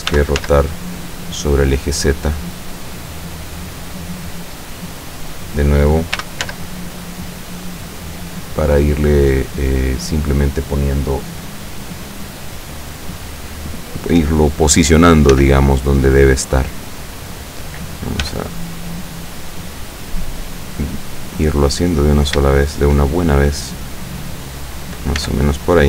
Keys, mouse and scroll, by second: 0.2 r, 0.4 z, 3.6 click, 4.0-5.6 middle drag, 6.2 r, 6.5 z, 9.4 click, 15.4 s, 16.9 click, 18.3 g, 20.5 click, 20.8-21.8 middle drag, 22.0-22.5 middle drag, 22.6 shift+middle click, 22.9 shift+scroll up 2, 23.9-25.1 drag, 25.3 s.